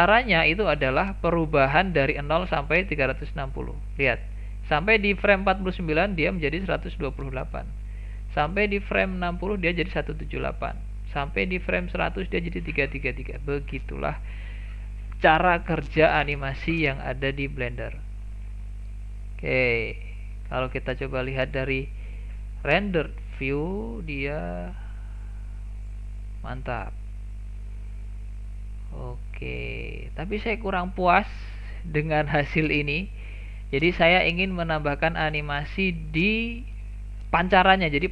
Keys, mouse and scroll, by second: 8.3-14.0 drag, 18.5-19.0 scroll down 1, 19.0-20.9 middle drag, 20.9-22.1 drag, 22.1 KP_0, 23.0-23.6 scroll up 1, 23.6-24.6 shift+middle drag, 24.6 click, 29.2-30.8 drag, 30.8-33.3 scroll down 3, 33.3-33.9 scroll down 1.